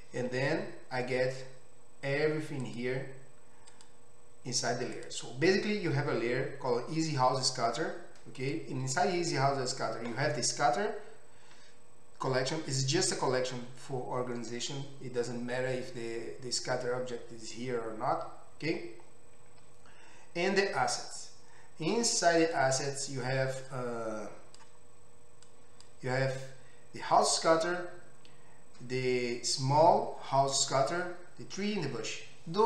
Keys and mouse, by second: 2.7 click, 2.9-4.9 middle drag, 4.9 click, 5.1-8.4 middle drag, 8.4 click, 8.5-22.4 middle drag, 22.4 click, 22.7-23.7 middle drag, 23.7-32.6 drag.